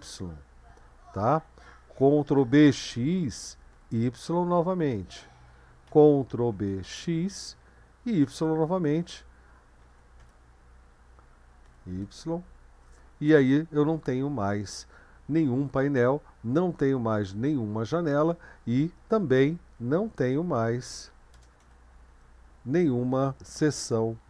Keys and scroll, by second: 2.2 ctrl+b, 2.7 typing, 3.7 typing, 5.9 ctrl+b, 6.5 typing, 8.2 typing, 9.8 ctrl+b, 10.2 typing, 11.6 typing, 19.5-22.6 typing.